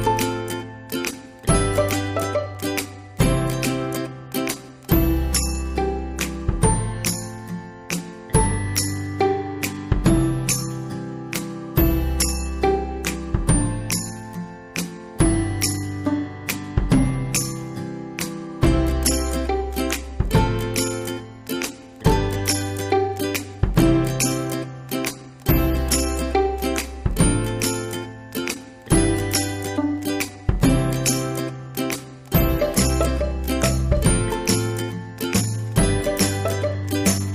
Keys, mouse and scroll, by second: 1.5-2.6 ctrl+scroll down 1, 3.4-10.5 drag, 13.7 click, 18.7 click, 25.1 click, 29.7 right click, 30.5 click, 31.7-32.2 ctrl+scroll down 1, 32.4-37.3 drag.